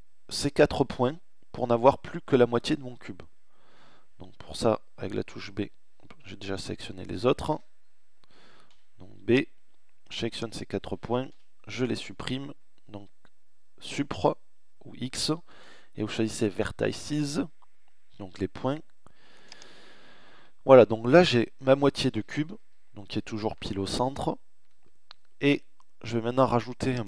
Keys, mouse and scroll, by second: 3.5 b, 4.9 click, 6.5 a, 7.6 b, 10.3 Delete, 19.3-21.5 middle drag, 21.5 KP_1.